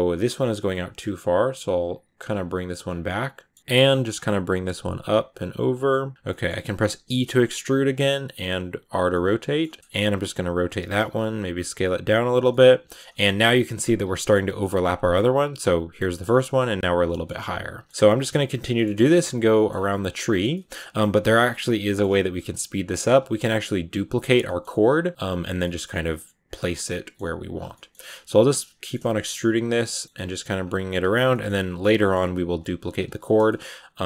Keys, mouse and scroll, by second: 0.4 right click, 0.6 middle click, 1.0 r, 2.0 r, 2.3 g, 2.9-4.3 middle drag, 4.3 g, 4.6 r, 5.1 g, 5.8 middle click, 6.1 scroll down 2, 6.2 middle click, 6.9 e, 8.3 r, 9.0 middle click, 9.6 g, 9.8 right click, 10.0 r, 10.7 s, 11.5 r, 12.2 right click, 12.4 middle click, 12.9 g, 13.2 scroll down 1, 13.3-14.3 middle drag, 14.3 g, 15.0 scroll up 3, 16.9 scroll down 2, 17.0 middle click, 17.3 r, 17.7 g, 17.9 r, 18.0 g, 18.5 scroll up 1, 18.5 middle click, 18.8-19.4 scroll down 7, 19.4 middle click, 19.6-20.1 scroll up 4, 20.1 shift+middle click, 20.7-21.0 scroll up 1, 21.0 middle click, 21.3-21.7 scroll up 3, 21.7 middle click, 21.9-25.8 typing, 24.3 middle click, 25.4 scroll down 3, 25.5 middle click, 26.7 middle click, 27.1 g, 27.5 scroll down 1, 27.6 middle click, 28.1 e, 28.6 shift+middle click, 29.4 r, 29.9 middle click, 30.0 g, 30.7 r, 31.2 middle click, 32.0 scroll up 1, 32.2 g, 32.6 r, 33.1 shift+middle click, 34.0 right click.